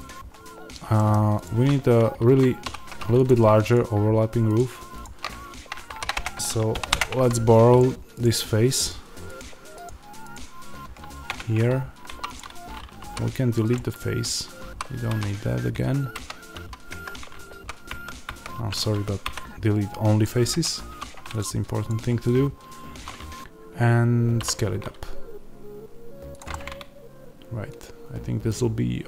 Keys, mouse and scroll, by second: 0.0-1.0 scroll down 2, 1.0 middle click, 1.4-3.6 drag, 1.7 Tab, 2.6 2, 5.8 shift+d, 6.1 Return, 6.8 p, 7.1 Tab, 7.7 click, 11.2 Tab, 12.0 3, 12.2-13.6 drag, 13.6 x, 14.5 2, 15.0 q, 17.4 ctrl+z, 20.1 x, 20.8 2, 21.3 click, 24.3 s, 26.3 click, 26.4-29.0 middle drag.